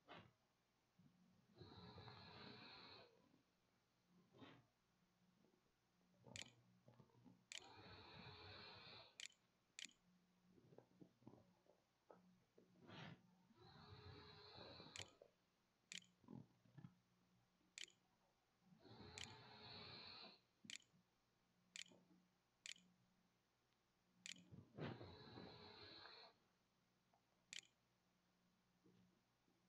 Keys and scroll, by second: 4.8-9.6 typing, 10.4 Tab, 13.6-24.2 typing, 26.1-27.3 typing.